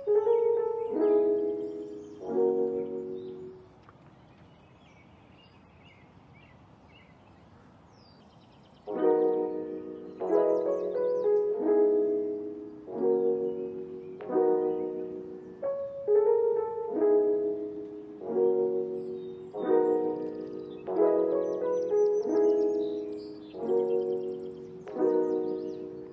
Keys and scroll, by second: 3.9 u, 11.2 space, 14.9 space, 19.6 space, 23.4 space, 23.8 ctrl+s.